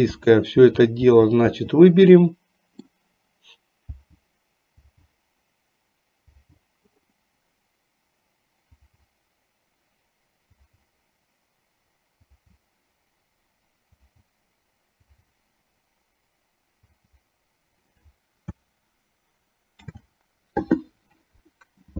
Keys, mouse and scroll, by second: 0.3 l, 1.3 l, 1.7 l, 2.3 middle click, 4.9 l, 6.6 l, 10.8 l, 12.4 l, 17.1 l, 20.0 ctrl+z.